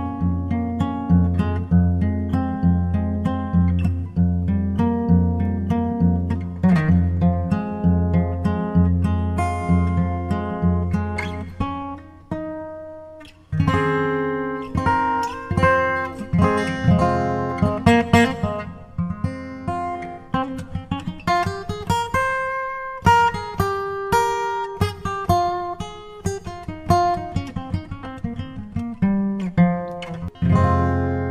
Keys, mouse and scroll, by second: 3.0-6.2 drag, 11.4-13.0 drag, 15.0-16.8 drag, 25.6-27.3 drag.